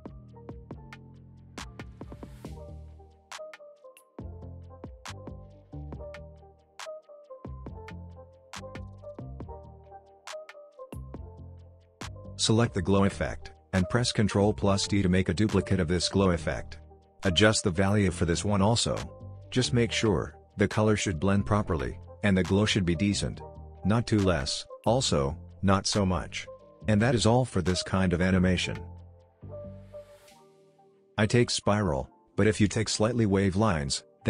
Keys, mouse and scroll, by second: 3.2 ctrl+z, 4.4-5.0 drag, 7.3 scroll down 1, 9.0-9.6 drag, 13.0-13.5 scroll down 1, 13.5 click, 14.6 ctrl+d, 16.0-17.7 scroll down 1, 17.7-19.3 drag, 31.4-31.8 scroll down 1, 31.8-32.5 scroll up 1, 32.5 click, 32.5-33.1 click, 33.1 space.